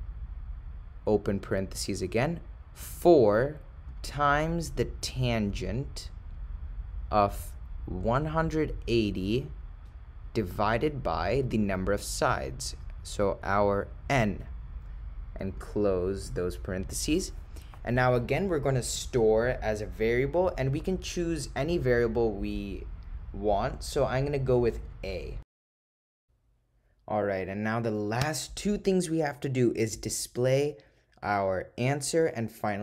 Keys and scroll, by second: 1.5 (, 2.9 4, 3.9 *, 8.1 1, 8.7 8, 9.4 0, 10.5 ÷, 15.6 ), 16.3 ).